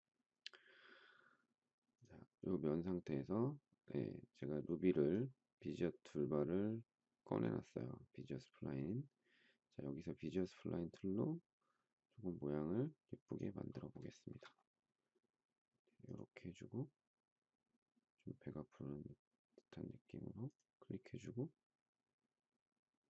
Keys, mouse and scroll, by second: 14.0 shift+middle click.